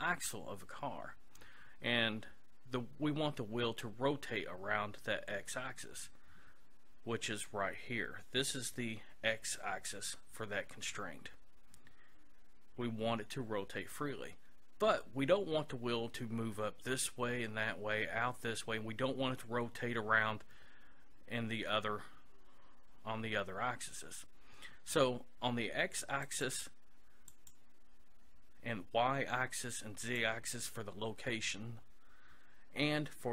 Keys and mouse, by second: 26.3-29.1 drag, 30.1-31.8 drag.